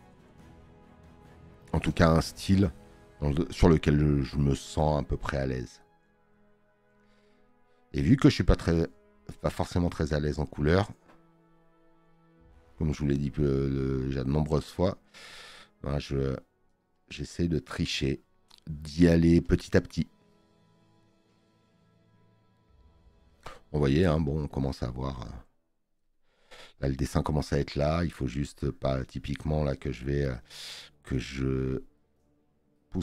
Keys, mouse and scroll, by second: 2.2 space, 2.5 click, 8.6 space, 8.7 click, 16.8 space, 17.0 click, 19.5 click, 29.6 space, 29.7 click.